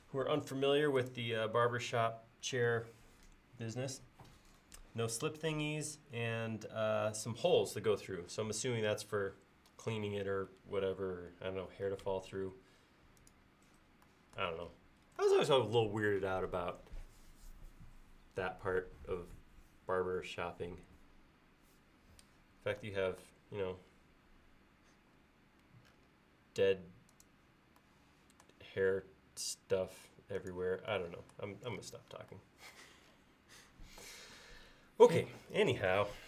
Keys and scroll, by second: 25.0 l.